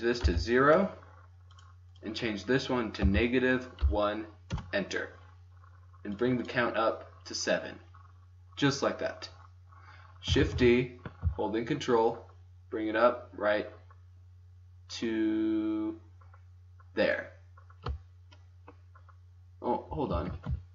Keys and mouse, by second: 1.9-3.7 drag, 6.1-8.5 drag, 10.3 shift+d, 19.9 g, 20.4 click.